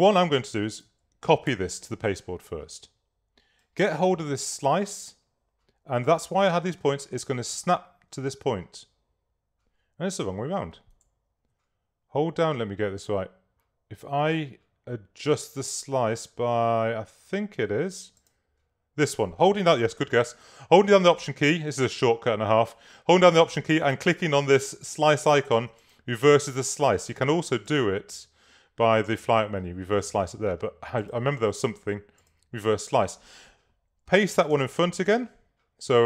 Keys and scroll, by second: 1.6 super+c.